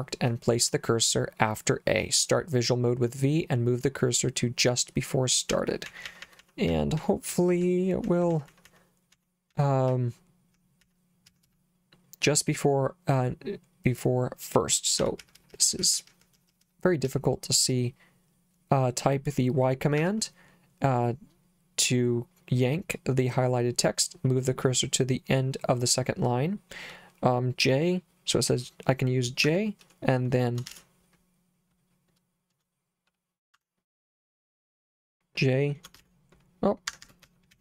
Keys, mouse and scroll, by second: 5.3-12.0 typing, 14.8-17.6 typing, 20.0 y, 29.5 j, 30.7 shift+4, 33.5 Escape, 36.0 shift+4, 36.9 Escape, 37.2 j, 37.5 k.